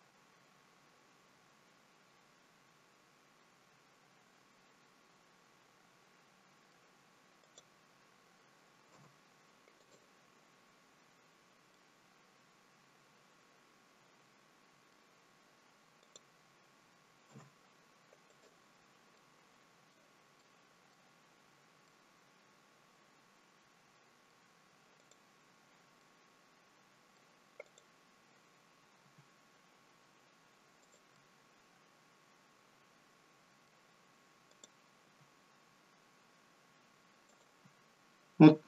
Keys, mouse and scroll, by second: 7.4 click, 9.0 Delete, 11.4-11.8 scroll up 2, 11.8 middle click, 16.1 click, 17.4 Delete, 19.2 middle click, 20.5 middle click, 21.9 middle click, 25.0 click, 26.1 middle click, 27.8 click, 29.1 g, 31.2 middle click, 34.6 click, 35.1 g.